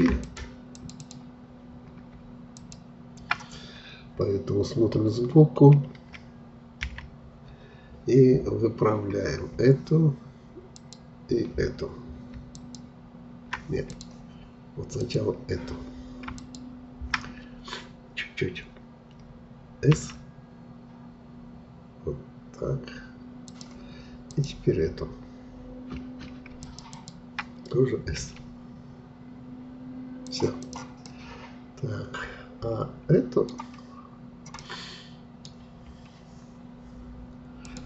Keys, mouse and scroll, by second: 6.7 KP_1, 9.0-10.7 scroll up 1, 10.7-19.3 shift+drag, 19.9 s, 24.2-28.2 drag, 28.2 s, 30.5 click, 31.0-34.0 middle drag, 34.6-37.6 middle drag, 37.6-37.8 drag.